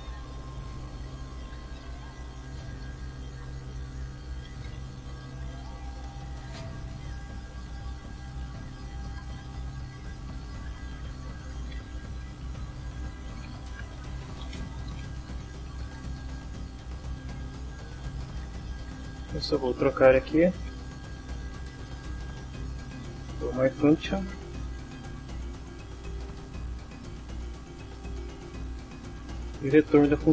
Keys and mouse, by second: 0.5 shift+Return, 0.9 shift+Tab, 1.1-16.3 typing, 6.2 Return, 17.0 Down, 17.5 Down, 18.3 Down, 19.0 Down, 19.4 Left, 19.9 shift+End, 20.0 shift+Left, 21.7 m, 22.0 y, 22.9 Return, 24.9 F6, 26.6 click, 27.3 click.